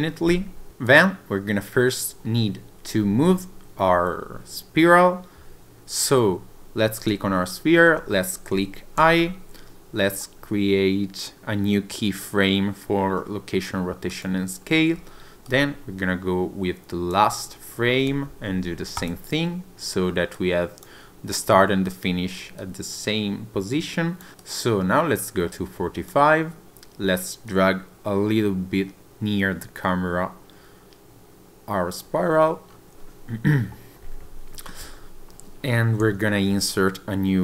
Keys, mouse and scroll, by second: 0.9 click, 5.6 click, 15.5 click, 20.4 click, 22.6 click, 24.4 click, 27.5 click, 32.5 scroll down 2, 32.7-34.0 scroll up 1.